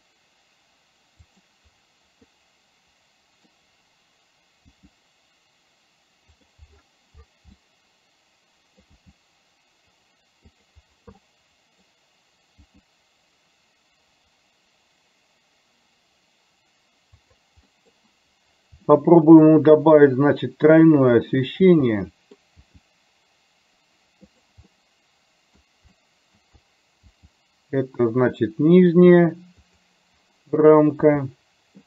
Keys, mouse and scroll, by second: 1.3 g, 2.3-3.6 middle drag, 6.5 g, 7.7-9.0 middle drag, 9.5 g, 11.3 middle click, 13.5 g, 17.8 middle click, 19.1-21.2 middle drag, 21.2 click, 22.0 middle click, 23.1 g, 25.0 middle click, 26.0 middle click, 27.1 g, 31.1 g.